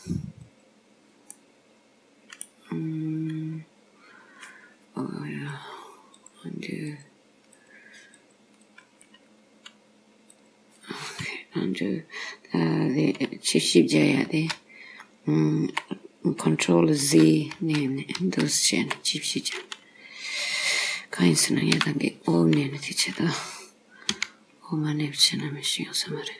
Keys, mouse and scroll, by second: 0.5 click, 1.4 middle click, 5.5 click, 6.9 click, 8.2 click, 10.4 click, 14.4 ctrl+z, 17.1 ctrl+z, 17.6 ctrl+z, 18.3 ctrl+z, 21.8 o, 24.2 e.